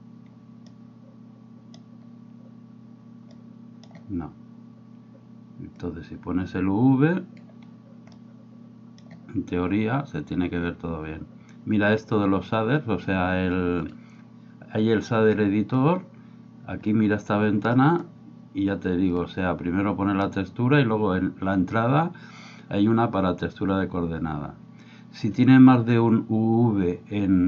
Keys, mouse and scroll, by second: 0.7-1.8 middle drag, 3.4 middle click, 5.9-7.4 drag, 8.2 middle click, 13.9-15.9 drag, 19.2-27.4 drag.